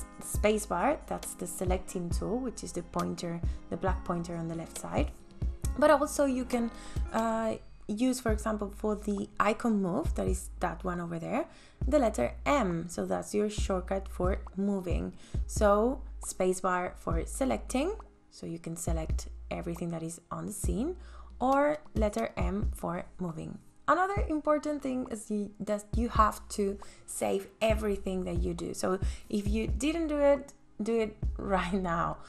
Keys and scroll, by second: 8.9 m, 14.9 space.